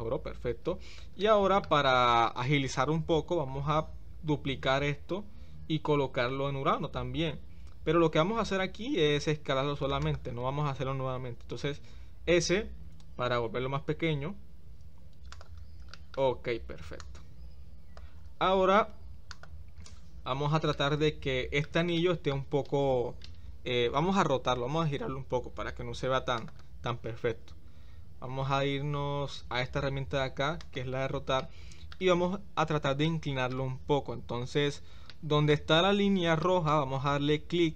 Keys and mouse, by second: 1.2 shift+middle click, 4.6 shift+d, 12.4 s, 15.9 shift+middle click, 17.0-18.0 drag, 19.3 click, 20.7-21.6 middle drag, 22.0 shift+middle click, 26.3 click, 30.7 click, 31.4-31.9 middle drag, 33.1 middle click, 35.2 shift+middle click, 36.5 shift+middle click.